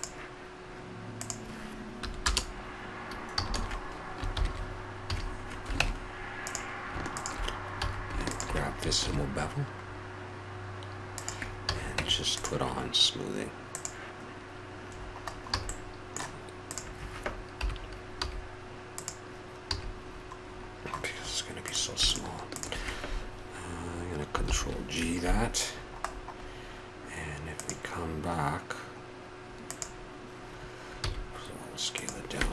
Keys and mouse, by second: 1.2-3.0 drag, 3.3 a, 3.5 a, 4.3 ctrl+n, 5.0 a, 5.8 ctrl+Tab, 7.8 a, 9.0 ctrl+b, 11.7 a, 12.0 Tab, 13.7-14.9 drag, 14.9-15.3 drag, 15.7 a, 17.6 KP_7, 18.2 g, 19.7 a, 20.9 middle click, 21.2 middle click, 21.4 middle click, 21.6-24.3 drag, 24.4 ctrl+g, 25.7-26.2 drag, 27.5-29.2 drag, 29.7-31.6 drag, 31.0 s.